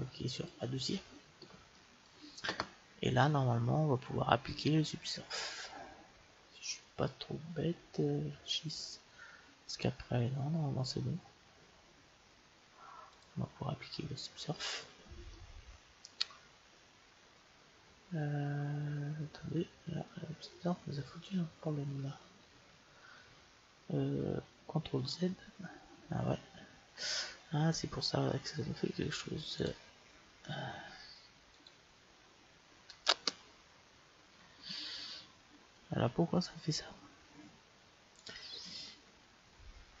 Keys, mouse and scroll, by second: 0.3-2.1 drag, 1.7 right click, 2.2 click, 2.4-3.5 middle drag, 13.1-15.0 drag, 15.3-17.1 middle drag, 25.5 ctrl+z, 29.6-31.4 drag, 31.5-33.3 drag, 35.8 ctrl+z, 38.2-40.0 drag.